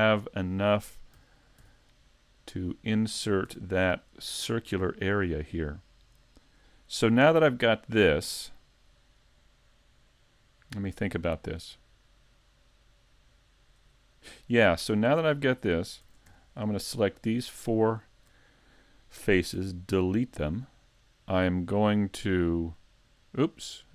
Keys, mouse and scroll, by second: 1.2 s, 3.1 click, 3.5 a, 3.8 middle click, 5.2 middle click, 7.9 scroll down 3, 16.0 ctrl+Tab, 16.7 right click, 17.1 shift+right click, 17.5 shift+right click, 17.8 shift+right click, 19.6 x, 22.4 click, 23.6 click.